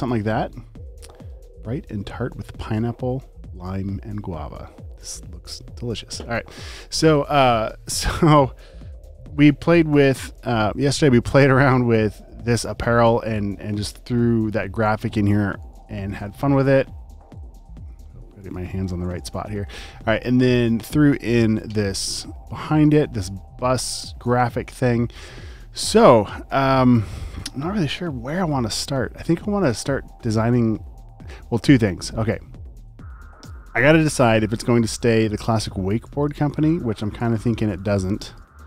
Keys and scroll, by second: 13.5 space, 14.1 super+space, 15.2 space, 15.7 ctrl+super+space, 17.2 space, 17.8 alt+super+space, 19.1 space, 35.8 space, 36.3 super+space, 37.1 space, 37.7 alt+super+space.